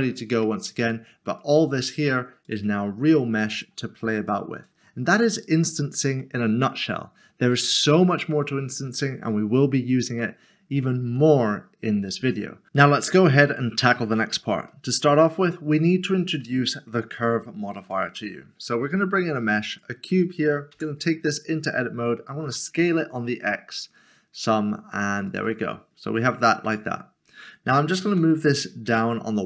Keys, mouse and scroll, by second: 0.4 middle click, 6.4 middle click, 10.9 middle click, 14.3 a, 14.7 middle click, 15.5 scroll up 1, 16.4 middle click, 17.7 a, 19.7 click, 20.7 Tab, 21.4 scroll down 1, 22.7 typing, 25.2 s, 25.7-26.6 scroll down 1, 26.7 Tab, 28.9 typing.